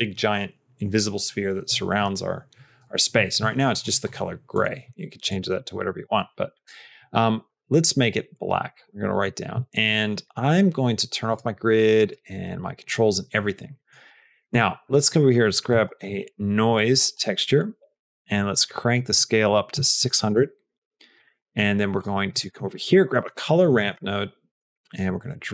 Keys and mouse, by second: 3.4 middle click, 4.4 click, 5.7 click, 6.4 click, 6.8 middle click, 8.6 click, 8.9 middle click, 10.3 middle click, 11.1 click, 11.9 click, 14.0 click, 14.3 shift+a, 18.8-20.7 drag, 19.9 KP_0, 21.0 click, 21.2 middle click, 21.8 click, 22.5 shift+a.